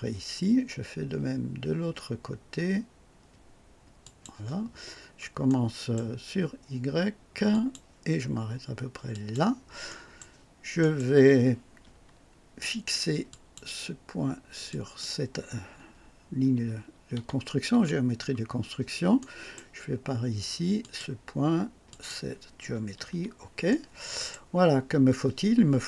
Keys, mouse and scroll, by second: 4.0 click, 5.5 right click, 7.5 click, 9.1 click, 9.9 right click, 10.8 right click, 13.3 click, 14.7 click, 17.7 o, 19.2 right click, 20.8 click, 21.9 click, 22.9 o, 23.7-24.5 right drag.